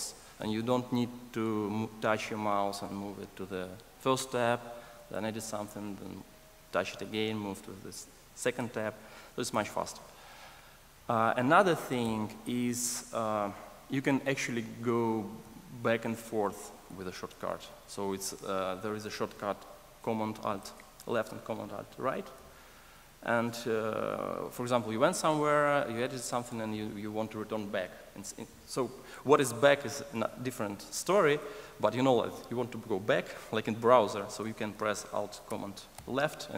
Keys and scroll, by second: 9.4 super+e, 16.9 alt+super+[, 17.4 alt+super+], 22.8 alt+super+[, 23.8 alt+super+], 35.9 alt+super+[.